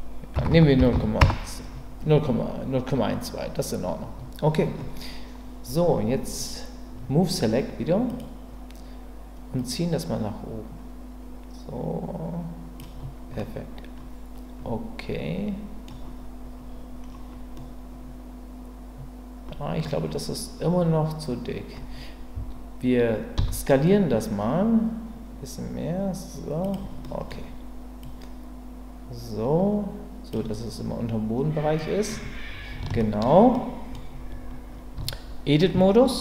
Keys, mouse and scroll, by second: 8.1 click, 9.6-12.8 drag, 13.4-13.9 scroll up 2, 13.9-17.5 middle drag, 17.5-18.3 scroll up 2, 18.3-18.8 scroll up 1, 18.8-19.4 scroll up 1, 19.4-19.8 scroll up 1, 23.4 s, 26.6 click, 27.0 middle click, 28.0-30.3 drag, 31.8-32.2 middle drag, 33.0 shift+middle click, 33.5-33.9 scroll up 1, 33.9-34.9 scroll down 1, 34.9 Tab.